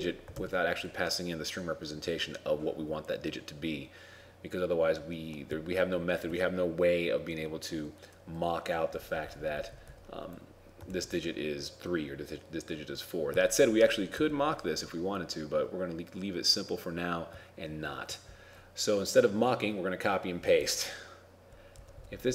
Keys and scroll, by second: 0.4 shift+Left, 11.0 ctrl+shift+Left.